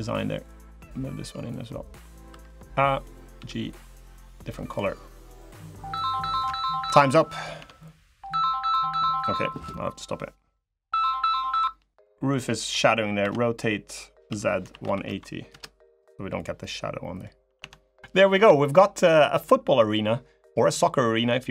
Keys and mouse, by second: 0.4 click, 1.3 click, 2.0 3, 2.3 click, 3.1 g, 4.8 click, 6.6 Escape, 7.2 click, 7.3 Tab, 7.5 middle click, 8.5 click, 11.9 a, 13.0 r, 16.1 click, 16.6 middle click, 17.3 Tab, 17.9 click, 20.3 click.